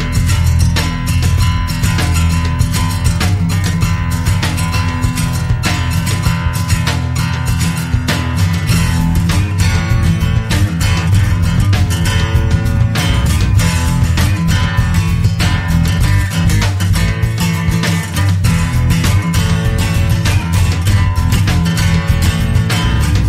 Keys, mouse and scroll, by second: 0.7 click, 2.2 click, 4.6-6.6 drag, 8.5 click, 11.7 click, 13.4 click, 16.0-16.9 scroll down 2, 17.1-17.5 scroll down 1, 22.7 click.